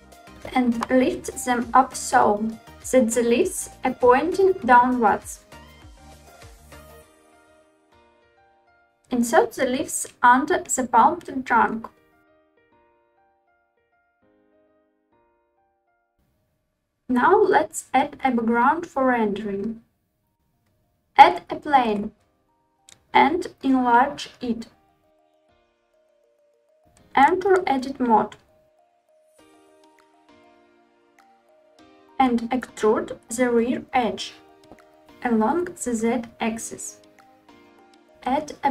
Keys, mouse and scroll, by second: 0.3 g, 6.3 click, 6.8 alt+z, 7.4 Tab, 8.8 click, 9.6 g, 12.0 drag, 12.5-13.1 middle drag, 14.6 click, 14.6 r, 14.7 middle click, 14.7 g, 14.8 y, 15.6 click, 15.6 middle click, 20.3 shift+a, 22.4 s, 25.7-26.3 scroll down 4, 26.6 Tab, 29.2 click, 32.7 e, 33.2 z, 35.8 click.